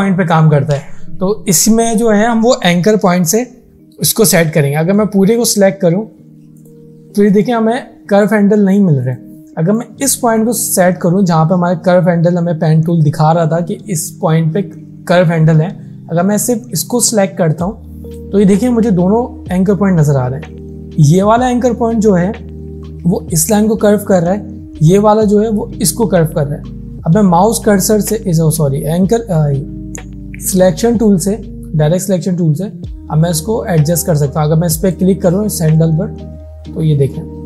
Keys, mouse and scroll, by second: 5.0-5.7 drag, 34.8-37.4 drag.